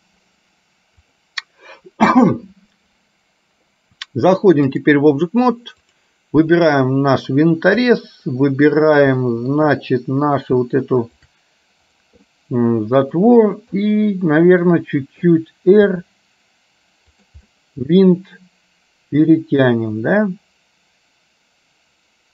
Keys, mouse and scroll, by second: 1.2-5.1 drag, 5.8 click, 9.3 shift+middle click, 11.2 shift+click, 12.3-13.3 middle drag, 13.8 middle click, 15.9 r, 17.6-22.3 middle drag.